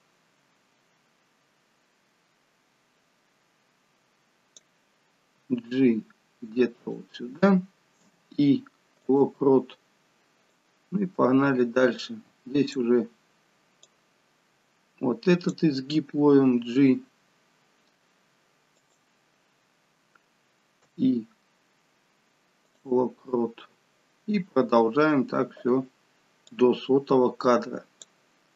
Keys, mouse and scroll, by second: 5.3 g, 8.0 i, 10.5 click, 14.0 click, 16.3 g, 20.9 i, 23.4 scroll down 3, 24.3 scroll up 2, 26.5 click.